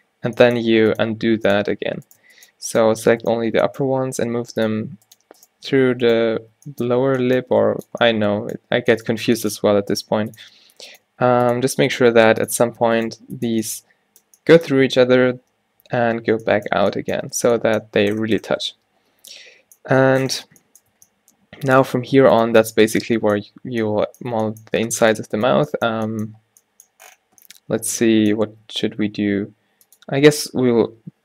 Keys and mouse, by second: 0.5 e, 3.7 g, 7.2 g, 10.1-14.9 drag, 10.2 g, 11.2 g, 12.1 g, 13.3 g, 16.9 Tab, 17.5 a, 18.3 Tab, 18.9 Tab, 21.1 Tab, 22.5 click, 25.0 g, 28.7 s, 30.8 ctrl+z.